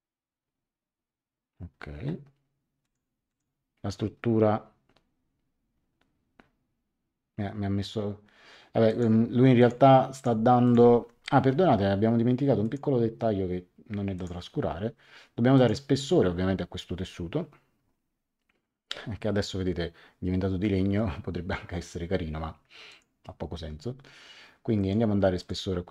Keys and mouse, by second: 2.8 click, 8.8 click, 10.8 Escape, 12.6 click, 14.1 click, 15.5 click, 22.8 click, 24.7 click.